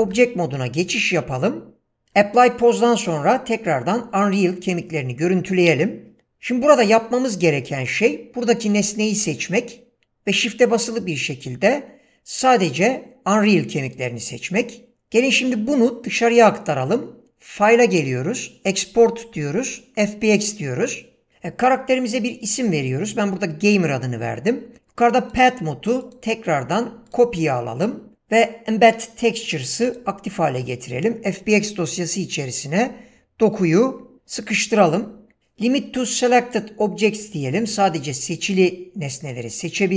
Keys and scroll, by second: 0.0 ctrl+Tab.